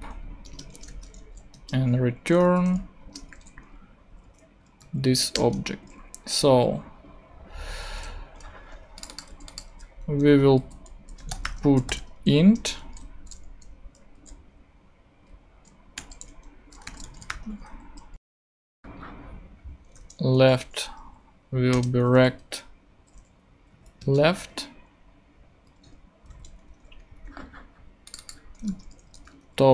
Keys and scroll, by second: 0.4 Return, 0.8 typing, 1.5 Return, 2.4 r, 3.0 Return, 3.3 ;, 4.6 super+Up, 4.8 super+Right, 5.3 super+Return, 5.9 Return, 9.3 super+c, 9.7 super+v, 10.6 super+., 10.9-12.4 typing, 12.5 shift+Return, 16.0-17.5 typing, 17.8 Right, 18.6 ,, 18.7 space, 19.7-20.5 typing, 21.7 Return, 22.2 ., 23.6 Down, 24.0 Return, 25.7 Right, 26.2 super+Right, 28.4-29.7 typing.